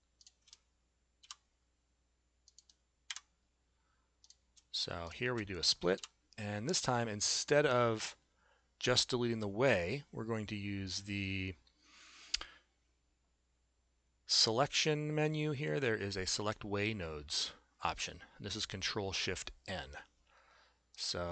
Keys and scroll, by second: 1.2 p, 3.1 Delete, 6.0 p.